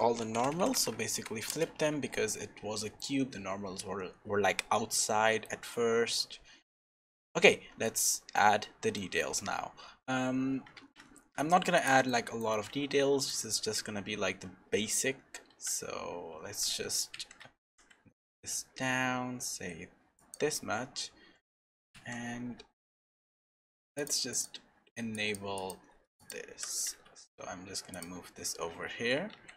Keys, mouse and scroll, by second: 1.9 Tab, 2.7 middle click, 4.9 middle click, 6.5-7.0 scroll up 1, 7.0 middle click, 7.8 shift+middle click, 8.9 middle click, 10.8 shift+a, 12.1 middle click, 12.6-13.1 scroll up 2, 13.3 shift+middle click, 15.5 s, 17.6 g, 24.0 click, 24.3 click, 26.5 g, 29.3 Tab.